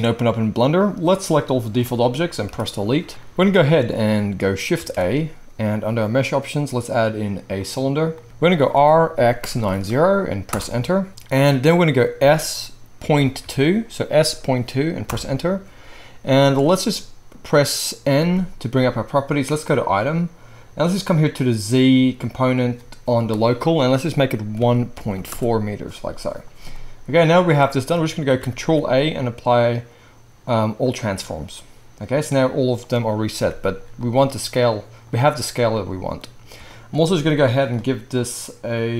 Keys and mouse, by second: 1.3-19.8 drag, 2.4 Delete, 4.7 shift+a, 8.8 r, 12.2 s, 18.2 n, 19.8-21.4 middle drag, 21.4-37.7 drag, 28.4 ctrl+a, 33.3 n, 37.7-38.1 middle drag, 38.1-38.9 drag.